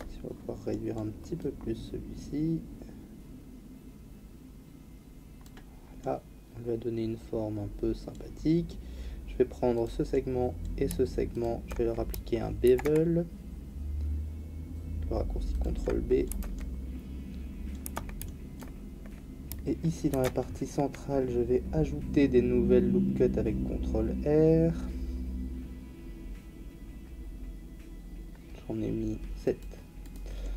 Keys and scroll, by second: 12.7 ctrl+b, 16.3 Tab, 20.1 ctrl+r.